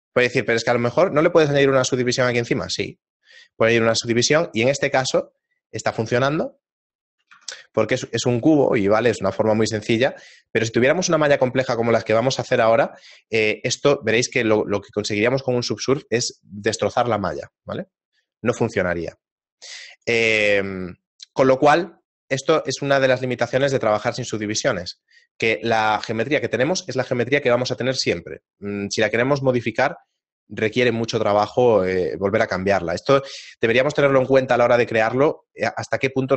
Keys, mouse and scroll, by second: 0.1-1.0 scroll down 1, 1.6 click, 3.6 shift+middle click, 4.4 ctrl+middle click, 5.2 shift+middle click, 8.1 Tab, 8.1 shift+middle click, 11.0 middle click, 17.2 Tab, 17.6 middle click, 20.4 click, 20.4 scroll down 5, 20.6 shift+middle click, 21.9 ctrl+middle click, 23.3 middle click, 23.9 shift+middle click, 24.5 middle click.